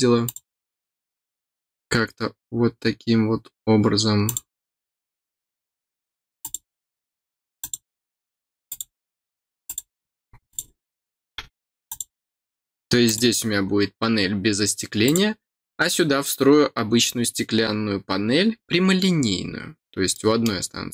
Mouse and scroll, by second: 0.2 click, 4.2 click, 6.4 click, 7.6 click, 8.6 click, 9.6 click, 10.4 click, 11.8 click, 13.0 click, 15.0 click, 20.1 middle click.